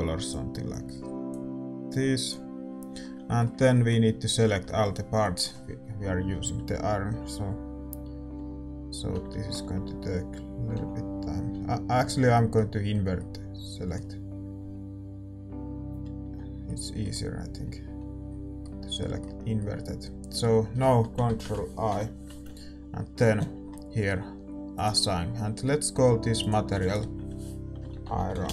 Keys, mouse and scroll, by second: 3.0 scroll up 1, 3.2-8.3 middle drag, 4.6 Tab, 8.3 l, 9.5 a, 10.7 l, 11.5 l, 12.0 scroll up 1, 12.3-15.2 middle drag, 14.5-16.2 typing, 16.6-21.9 middle drag, 17.5 l, 17.9 l, 21.9 ctrl+i, 25.9-28.4 drag.